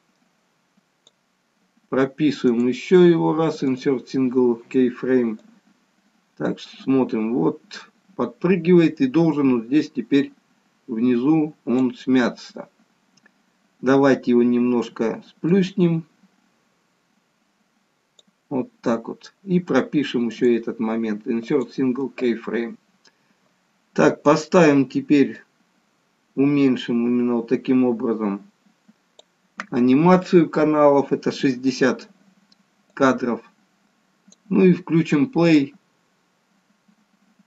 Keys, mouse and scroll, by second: 2.5 right click, 5.4 click, 15.5 click, 20.4 right click, 25.5 click, 33.0 click, 35.4 click.